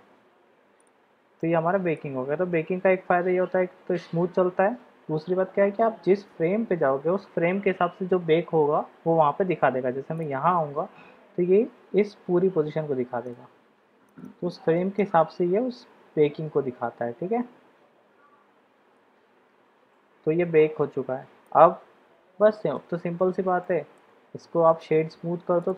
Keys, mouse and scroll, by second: 0.9-1.3 drag, 1.3-2.0 middle drag, 10.3 click, 13.4 click, 14.2 click, 14.5 click, 15.1-21.6 drag, 22.3-22.8 shift+middle drag, 23.6-23.9 shift+middle drag, 24.7-25.7 middle drag.